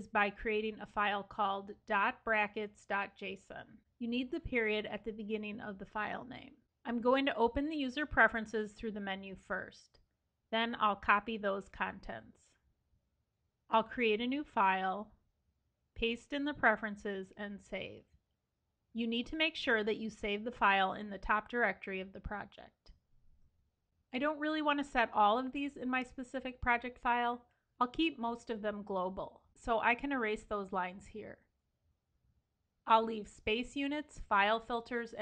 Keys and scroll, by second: 10.7 super+a, 11.5 super+c, 13.6 super+n, 15.7 super+v, 17.3 super+s, 30.2 super+x, 30.4 super+x, 30.9 super+x, 33.0 super+x, 34.3 super+x.